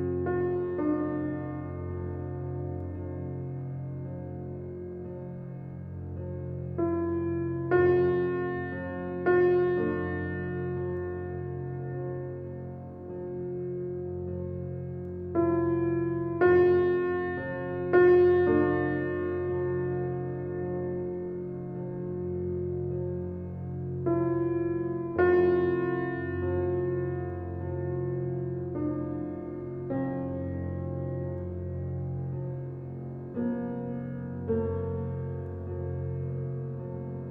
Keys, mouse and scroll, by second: 5.7 click, 12.6-13.1 scroll down 1, 16.1 click, 16.5-16.9 scroll down 1, 17.4-17.8 scroll up 1, 17.8 click, 18.3 scroll up 1, 18.9-19.9 typing, 20.8 click, 30.7-31.2 scroll down 1, 35.9 click.